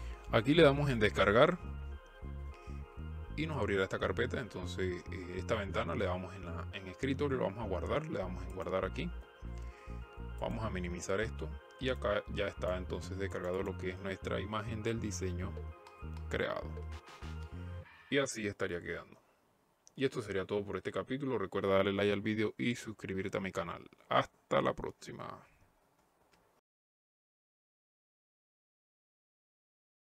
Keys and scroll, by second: 16.9 F9.